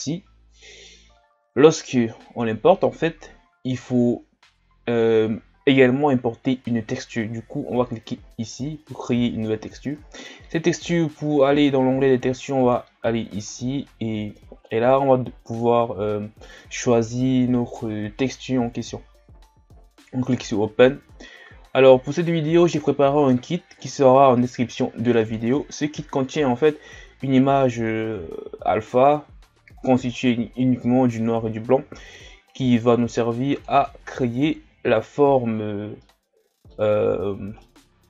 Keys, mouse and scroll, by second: 13.5 scroll down 1, 35.0-36.0 scroll down 1, 36.0-36.8 middle drag, 36.8-37.6 scroll up 2, 37.6-38.0 middle drag.